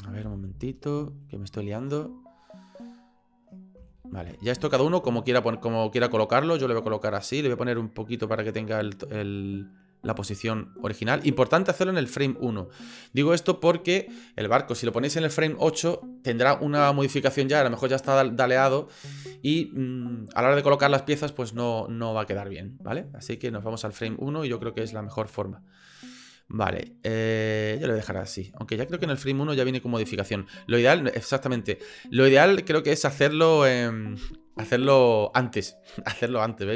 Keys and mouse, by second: 0.2 KP_1, 1.3 shift+click, 4.0 shift+click, 7.2 click, 8.2-10.1 drag, 11.7-13.1 drag, 23.1-23.5 middle drag, 23.9 shift+middle click, 24.8 shift+middle click, 26.3-27.1 middle drag, 28.0 click, 28.9 shift+middle click, 31.7-32.8 shift+middle drag, 32.8 click, 35.3-36.7 drag.